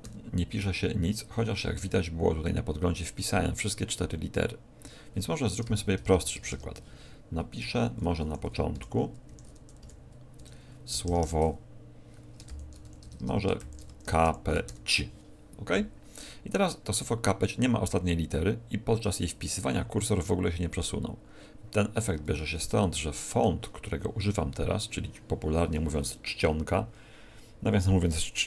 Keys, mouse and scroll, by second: 0.0 c, 5.6-7.5 typing, 8.7 KP_7, 9.2 Escape, 9.8 KP_7, 10.3 Tab, 10.9 BackSpace, 11.0 BackSpace, 11.1 BackSpace, 12.5-14.7 typing, 21.9 Tab, 22.7 shift+middle click.